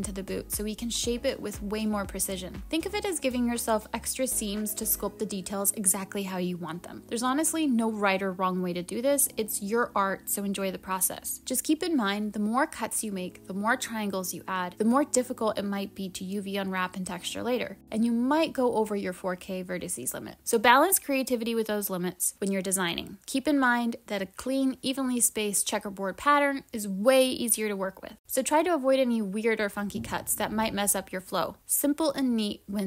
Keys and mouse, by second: 0.2 click, 1.5 click, 2.1 click, 3.7 click, 6.2-8.3 drag, 8.6-10.3 drag, 10.6 click.